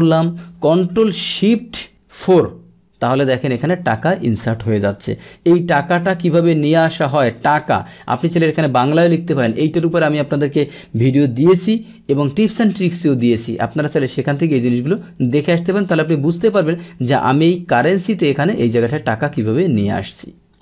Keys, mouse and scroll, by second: 2.3 ctrl+shift+4, 4.2 click, 4.8 click, 6.4 click, 7.3 click, 9.3 click, 14.1 click, 17.4 click, 20.5 click.